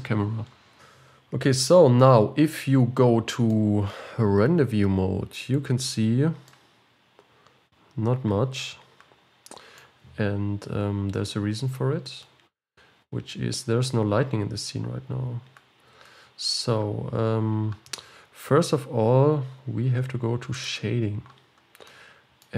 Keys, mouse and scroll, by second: 0.6-2.0 scroll up 9, 0.8 click, 2.1-5.7 middle drag, 5.7 z, 6.5-9.9 middle drag, 10.4 z, 20.8 click, 22.0-22.5 middle drag.